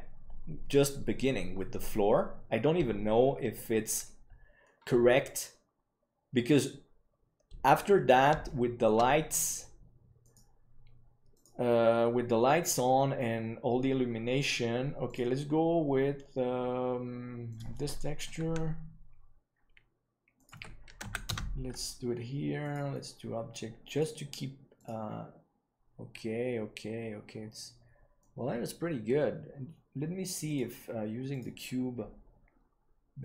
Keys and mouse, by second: 4.6-7.7 middle drag, 8.4-8.8 shift+middle drag, 9.0-9.4 middle drag, 10.2-14.2 drag, 15.0-20.2 drag, 20.3-26.9 drag, 28.1 middle click, 30.4-33.2 drag.